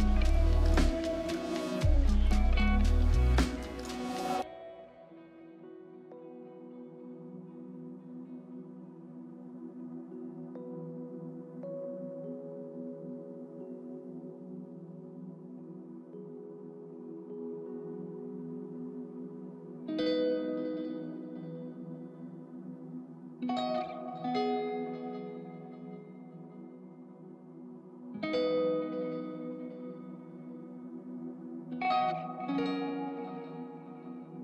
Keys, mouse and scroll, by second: 2.5 right click, 8.1 middle click, 14.2 right click, 20.8 right click, 23.7 double click.